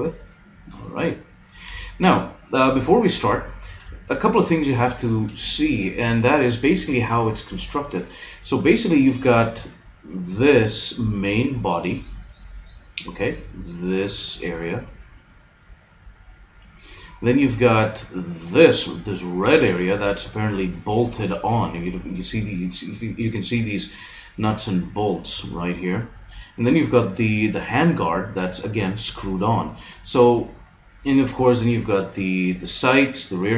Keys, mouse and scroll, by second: 1.4-6.4 middle drag.